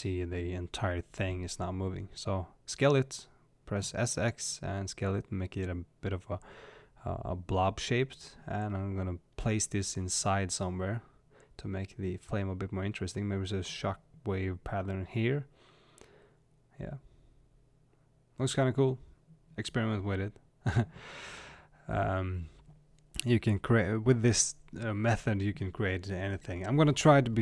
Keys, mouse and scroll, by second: 0.4 s, 4.4 click, 8.8 g, 13.6 click, 15.1-19.2 shift+middle drag, 21.1 click, 21.9 click.